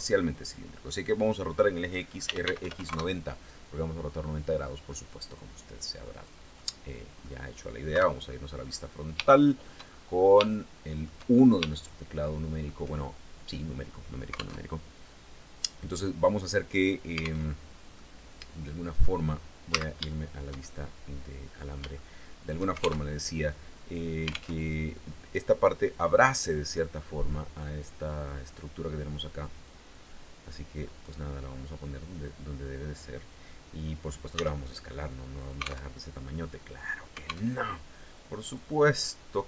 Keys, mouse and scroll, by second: 1.6-2.5 typing, 4.0-6.0 drag, 6.1 middle click, 7.5 KP_1, 8.1-8.8 scroll down 4, 8.8 shift+middle click, 9.8 scroll up 1, 10.1 shift+middle click, 10.9-11.2 shift+scroll up 1, 11.3-12.4 shift+middle drag, 14.1 alt+Tab, 17.0 alt+Tab, 17.5-18.8 drag, 19.3 z, 19.7-22.3 shift+drag, 22.6 alt+shift+Tab, 24.1 alt+Tab, 29.2-30.8 drag, 31.0 scroll up 2, 33.9 s, 34.9 alt+click, 35.4 alt+Tab, 37.1 alt+Tab, 38.1-39.4 drag.